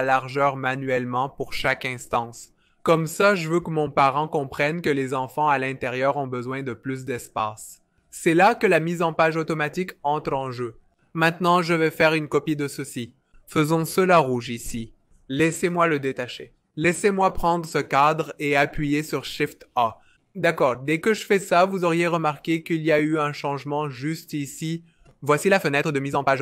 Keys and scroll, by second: 3.0 super+z, 9.0 shift+a, 13.8-14.7 typing, 16.1 alt+super+b, 19.6 shift+a.